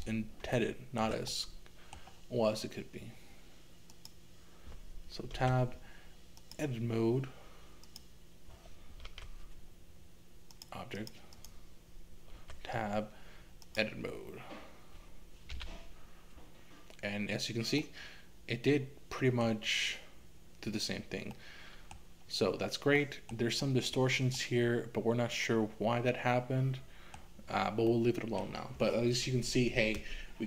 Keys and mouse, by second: 0.6 shift+middle click, 1.4 middle click, 3.9 click, 5.3 Tab, 7.9 click, 9.1 Tab, 11.4 click, 12.4 Tab, 15.5 a, 17.9-19.5 middle drag, 21.4 middle click, 23.0 middle click, 24.3-27.2 middle drag, 28.0-30.4 middle drag.